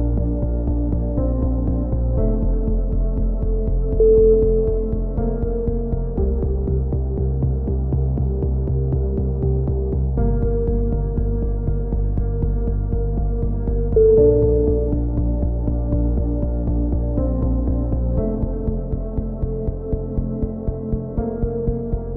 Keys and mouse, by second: 1.2 Tab, 1.5 Tab, 1.9 a, 2.1 c, 3.9 a, 4.7 z, 5.8 ctrl+KP_1, 6.0 z, 6.4 ctrl+r, 7.6 z, 7.8 a, 8.7 click, 9.7 ctrl+KP_1, 10.2 z, 10.2 s, 11.0 a, 11.1 z, 11.3 Tab, 11.7 click, 14.7-16.3 typing, 20.7 KP_1, 21.0 z.